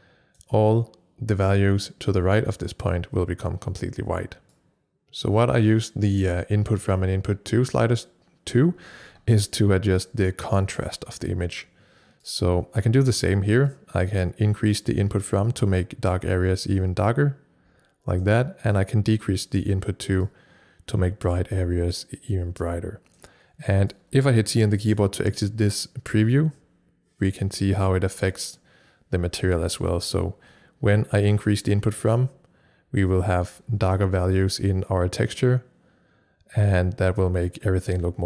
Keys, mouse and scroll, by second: 4.6-8.9 drag, 10.1-26.1 drag, 26.1 c, 28.2-36.7 drag.